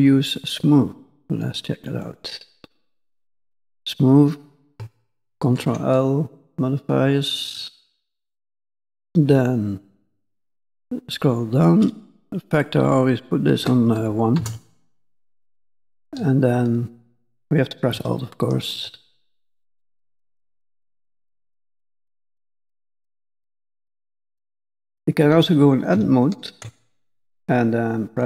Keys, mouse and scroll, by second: 2.5-3.7 scroll down 1, 3.7-4.6 scroll down 2, 5.4 ctrl+l, 7.6-8.5 scroll down 6, 8.5-10.3 scroll down 1, 10.3-12.2 scroll down 13, 12.2 click, 12.2-14.0 scroll down 3, 15.6 shift+click, 18.6 alt+click, 25.9 Tab.